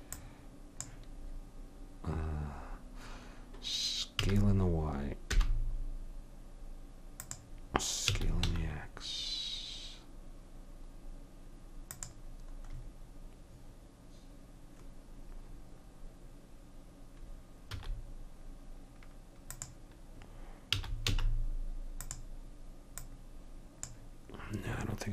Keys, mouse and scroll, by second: 0.4-4.1 drag, 4.2 s, 8.0 s, 17.7 s, 20.7 s, 23.0-24.2 drag.